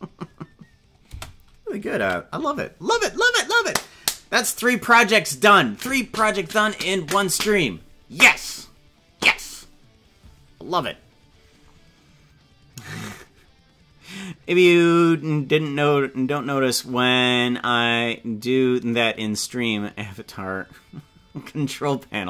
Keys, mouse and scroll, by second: 1.2 space, 2.0 ctrl+s.